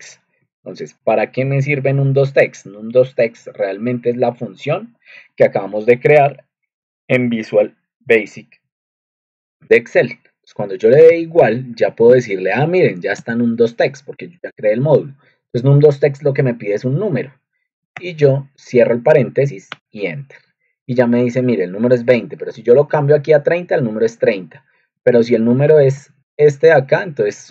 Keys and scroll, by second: 3.8 ctrl+2, 6.7 Escape, 11.0-12.5 typing, 12.8 Down, 13.1 Tab, 13.5 typing, 15.1 typing, 17.9 (, 19.6 Return, 21.4 Up, 22.0-23.1 typing, 23.3 Down, 24.7-27.1 typing, 26.2 Return.